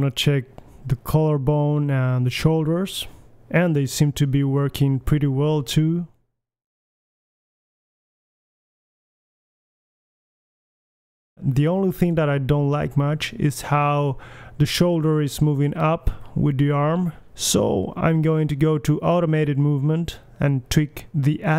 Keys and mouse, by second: 0.4-1.6 middle drag, 1.9 middle click, 2.1 r, 3.2 r, 4.1 middle click, 4.3 KP_1, 4.6 click, 4.9 g, 5.0 middle click, 6.4 click, 6.4 g, 6.9 g, 7.3 click, 7.4 g, 7.9-8.5 middle drag, 8.1 alt+g, 8.7-9.6 middle drag, 9.3 g, 9.9 middle click, 10.1 middle click, 10.3-10.6 drag, 10.3 g, 10.8-11.2 drag, 11.0 g, 11.6 middle click, 11.6 g, 11.8-12.2 drag, 12.2 middle drag, 12.2 g, 13.1 middle click, 13.3 KP_1, 13.4 click, 13.5 alt+g, 13.7-15.7 drag, 15.7-16.7 right drag, 15.7 g, 18.1-21.4 drag, 18.8 g.